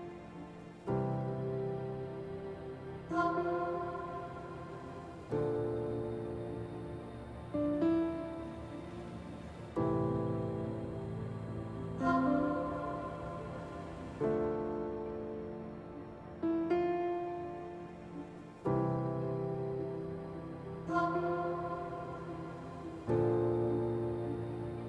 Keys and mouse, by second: 2.2 click, 5.1 shift+click, 7.4 shift+click, 11.9 shift+click, 12.8-14.4 shift+drag, 15.2 shift+middle click, 15.9-18.4 middle drag, 18.6 Tab, 19.9 i.